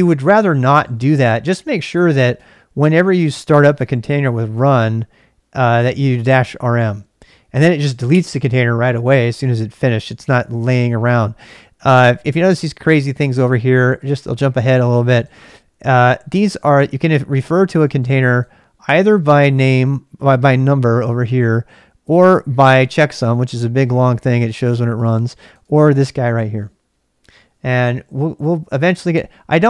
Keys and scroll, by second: 0.6 ctrl+[, 0.8-4.5 typing, 5.5 k.